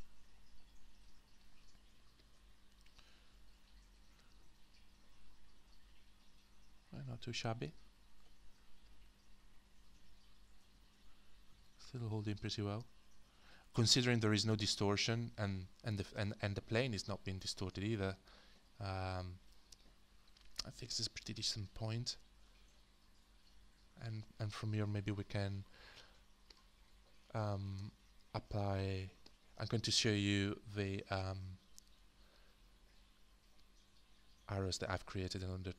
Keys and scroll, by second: 27.7 space.